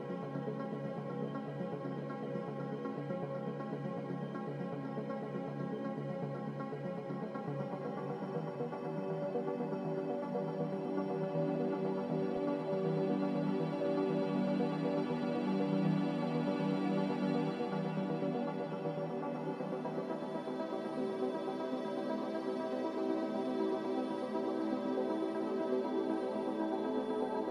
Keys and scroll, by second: 15.6 m, 16.8 Escape, 22.1 a.